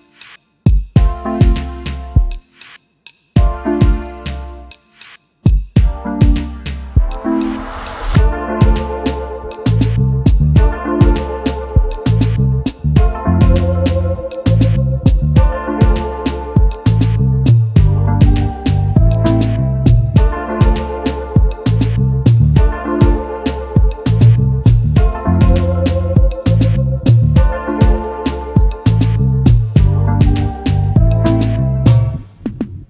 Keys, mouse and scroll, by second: 1.8 alt+scroll down 1, 4.6 alt+scroll up 1, 5.4 space, 5.5 double click, 7.9 space, 8.0 double click, 8.3 space, 8.9-9.2 alt+scroll down 1, 10.3 Delete, 10.6-11.2 scroll up 1, 14.4 alt+scroll up 1, 17.0 double click, 17.7 space, 19.4 typing, 21.8 double click, 25.4 double click, 25.6 double click, 27.8 ctrl+shift+o, 28.6 shift+click.